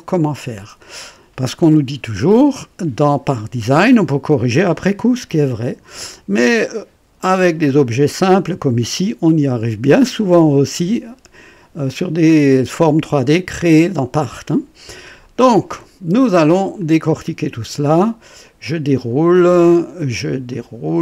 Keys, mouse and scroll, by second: 0.1 click, 16.7 click, 18.4 click, 20.4 click.